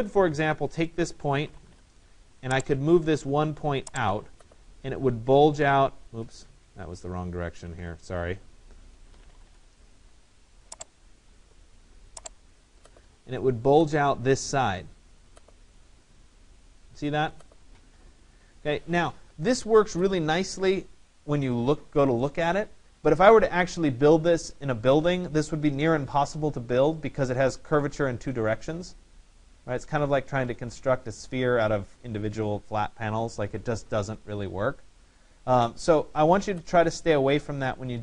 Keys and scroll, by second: 1.4 Return, 7.3 ctrl+z, 9.6 Return.